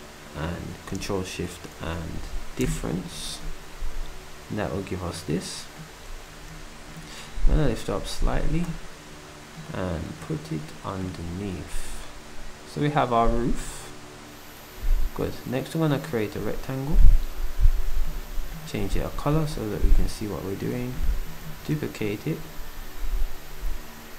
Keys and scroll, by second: 6.1 z, 18.1 d, 21.4 d.